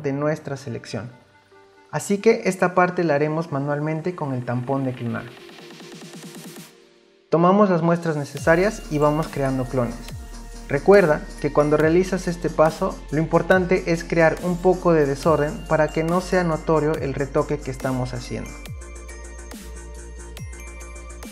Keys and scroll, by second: 4.9 s.